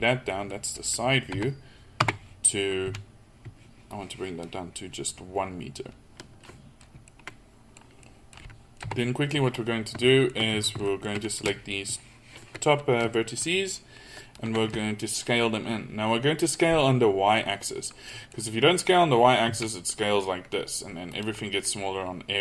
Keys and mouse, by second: 1.3 KP_3, 2.1 Tab, 2.9 a, 8.9 KP_3, 10.6 a, 19.5 s, 21.5 click.